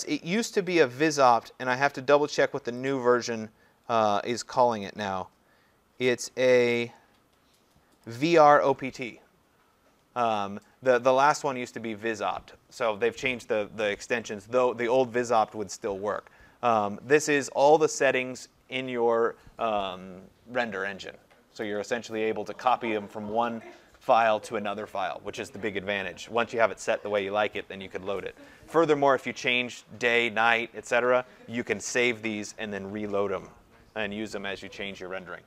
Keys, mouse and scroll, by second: 0.8 click, 2.9 click, 4.9 click, 8.1 click.